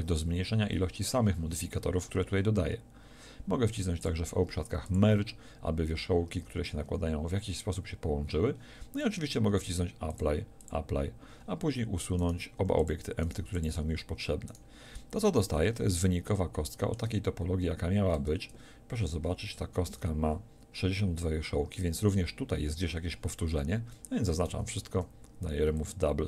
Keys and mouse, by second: 8.7-10.1 middle drag, 12.6 x, 13.5 x, 16.0 click, 18.1 Tab, 19.5 a, 19.9 a, 24.5 a, 24.9 w.